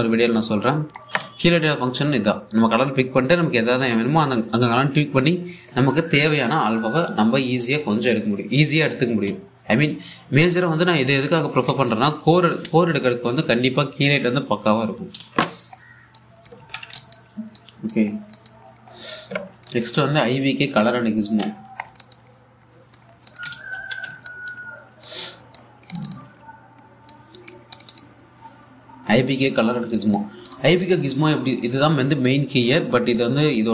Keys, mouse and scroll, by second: 2.1 click, 2.1 typing, 16.4-16.8 scroll down 1, 16.8 click, 17.2 ctrl+shift+x, 17.4 shift+scroll down 1, 17.6 click, 18.8 scroll up 1, 19.0 click, 19.5-19.9 scroll up 1, 20.2 alt+scroll down 1, 20.3 alt+click, 21.9 ctrl+c, 22.2-22.5 scroll down 1, 22.6 alt+click, 23.0-23.9 scroll up 1, 23.9 click, 24.4 v, 24.9 alt+click, 27.0-27.8 scroll up 1, 27.8 click, 30.5 alt+Num_Lock, 30.5 click, 32.0-32.9 scroll up 1, 32.9-33.7 drag.